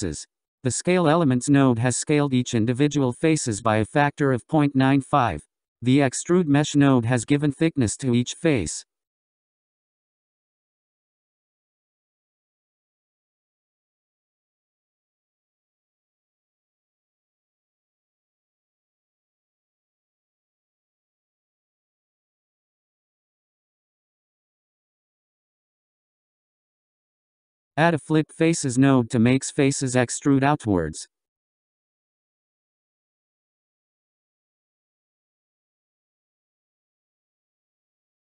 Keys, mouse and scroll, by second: 6.0-7.1 scroll up 11, 7.1-8.6 middle drag, 8.6-9.0 scroll down 7, 9.4-10.3 scroll up 10, 13.2-16.3 drag, 22.9-25.9 drag, 28.6-29.3 scroll down 9, 31.5-31.8 scroll down 5, 32.2-33.9 scroll up 7, 35.8 click, 38.0 shift+a.